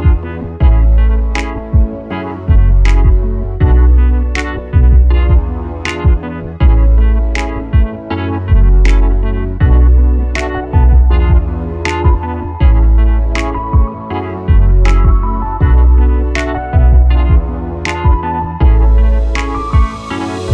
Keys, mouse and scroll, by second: 16.4-20.5 drag.